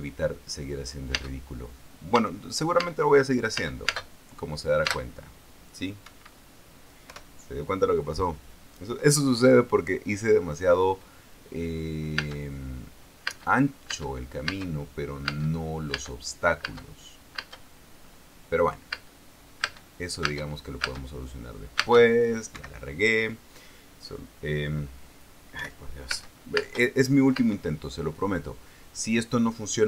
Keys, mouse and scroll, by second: 1.9 space, 2.9 space, 3.5 space, 4.3 space, 5.6 space, 7.8 p, 12.9 space, 14.0 space, 16.0 space, 17.4 space, 18.1 space, 19.6 space, 20.4 space, 22.5 space, 23.2 Escape, 26.3 p, 26.8 space, 28.4 space.